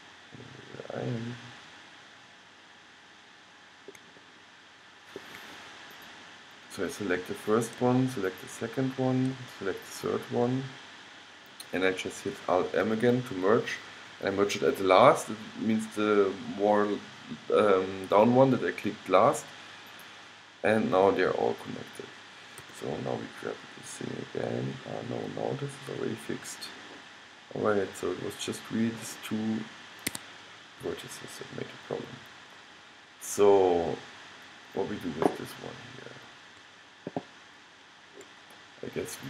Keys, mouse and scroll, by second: 0.6 click, 1.5 middle click, 2.6 middle click, 3.1 middle click, 3.3 middle click, 3.7 middle click, 4.7-6.0 middle drag, 6.0-11.7 drag, 13.0 alt+m, 22.7 g, 31.3-39.2 middle drag.